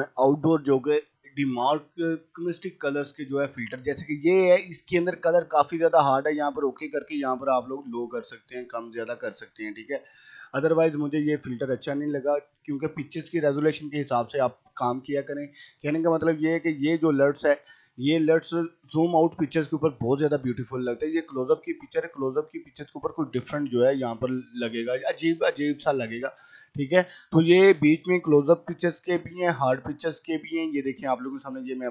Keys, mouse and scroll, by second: 3.2-5.0 scroll, 5.0 scroll up 1, 5.5 click, 9.5 ctrl+z, 11.6 right click, 12.6 click, 20.9 click, 22.1-23.2 scroll up 1, 30.6 click.